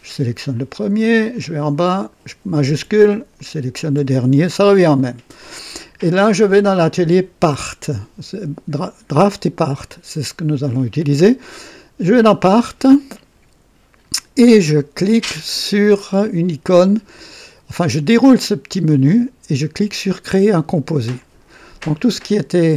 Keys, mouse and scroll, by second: 1.3-2.3 drag, 3.4 shift+click, 6.8 click, 12.2 click, 18.9 click, 21.2 click.